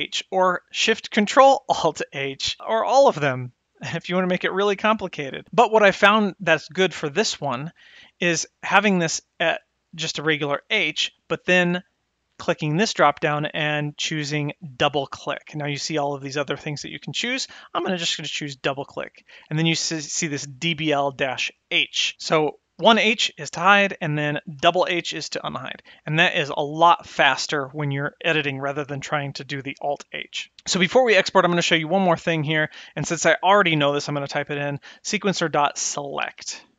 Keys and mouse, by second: 0.4 click, 2.6 click, 3.1 click, 3.6 click, 5.0 click, 12.1-18.7 drag, 22.9 h, 24.6 h, 24.8 h, 32.4-36.7 drag.